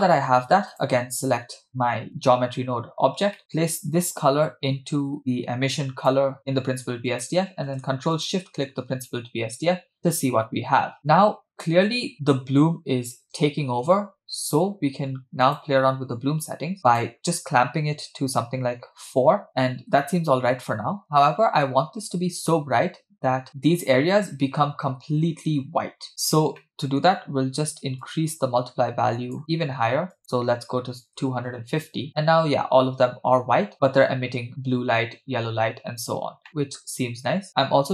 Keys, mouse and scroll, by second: 0.7 click, 3.4 middle click, 4.1-6.1 drag, 7.1 click, 8.3 ctrl+shift+click, 15.4 click, 16.9-19.5 drag, 23.5-24.1 scroll up 4, 26.1-26.6 scroll down 2, 26.6 middle click, 27.3-28.0 scroll up 2, 28.0-29.4 drag, 31.9 click, 36.5 middle click, 37.3-37.9 scroll up 2.